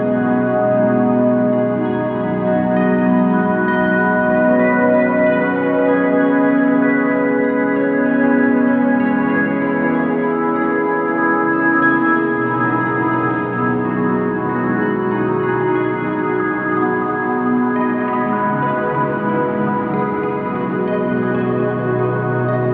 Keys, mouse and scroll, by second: 0.0 KP_Decimal, 0.8 a, 2.8 Tab, 3.6 click, 7.0 ctrl+space, 7.6 click, 11.2 KP_7, 11.8 click, 12.3 KP_7, 12.7 Tab, 12.8 shift+click, 16.1 Tab, 17.8 click.